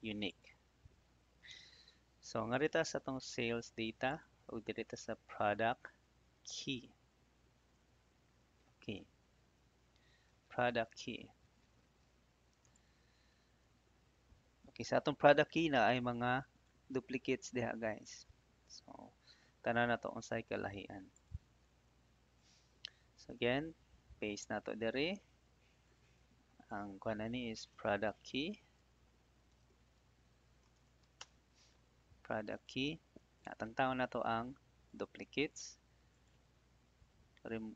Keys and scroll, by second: 5.8 ctrl+Up, 6.2 Down, 24.4 ctrl+v, 27.4-28.4 typing, 30.4-31.3 typing.